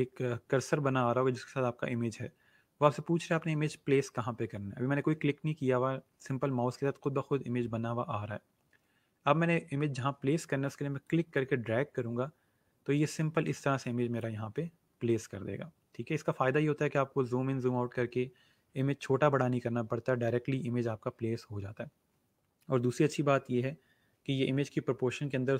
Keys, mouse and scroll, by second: 11.0 click.